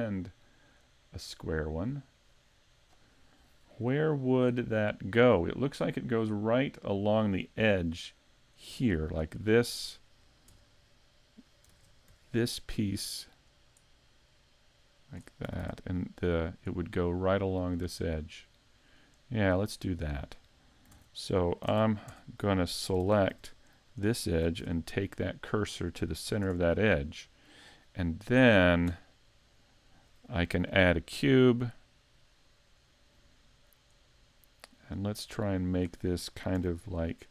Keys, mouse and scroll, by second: 0.2 middle click, 8.4 right click, 8.9 shift+middle click, 9.5-10.0 scroll up 1, 10.0 shift+middle click, 10.0-10.5 scroll up 2, 10.5 Tab, 10.9 middle click, 11.7 ctrl+Tab, 12.7 right click, 13.5 right click, 14.3 click, 15.5 a, 15.6 Tab, 16.3 middle click, 16.9 middle click, 18.4 shift+middle click, 19.9 right click, 20.9 ctrl+Tab, 21.8 ctrl+Tab, 23.0 ctrl+Tab, 23.8 right click, 24.6 shift+s, 26.3 a, 26.4 Tab, 26.7-27.1 scroll down 2, 27.2 middle click, 28.3 middle click, 29.3 middle click, 32.1 click, 33.2 middle click, 34.6 click, 36.6 s.